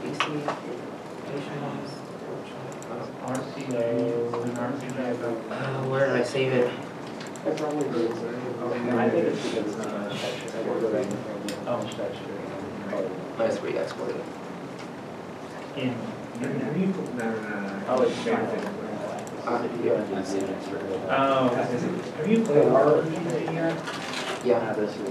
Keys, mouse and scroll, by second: 11.2 scroll, 21.9 alt+Tab.